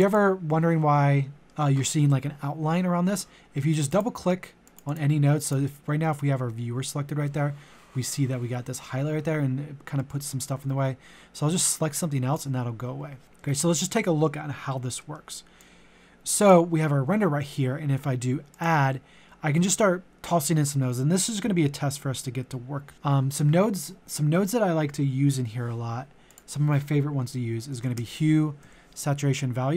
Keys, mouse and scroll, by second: 1.4 alt+middle click, 3.7-13.2 drag, 13.2 middle click, 15.5-27.3 drag, 27.7-28.6 typing.